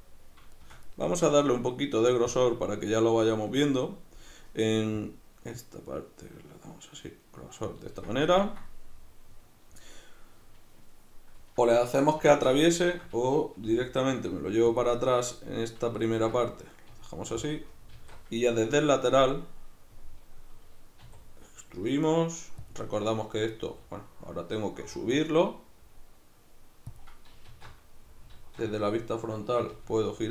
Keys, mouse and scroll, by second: 0.6-2.3 shift+middle drag, 2.3-8.4 drag, 8.4-14.8 ctrl+middle drag, 12.3 alt+q, 14.1 g, 14.8 click, 14.9-17.5 middle drag, 16.9 g, 17.5 click, 17.9 alt+q, 18.7-22.7 shift+middle drag, 21.1 e, 22.7 click, 23.7 e, 27.0 click, 27.5 alt+q, 29.7 g.